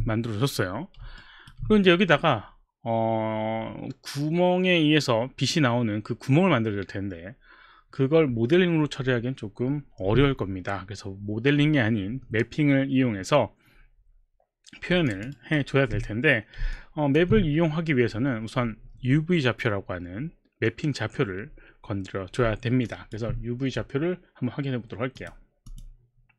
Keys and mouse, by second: 1.2 alt+right click, 1.8 click, 15.0 alt+click, 15.4 alt+right click, 17.3 alt+click, 22.8 alt+click, 25.2 click, 25.7 click.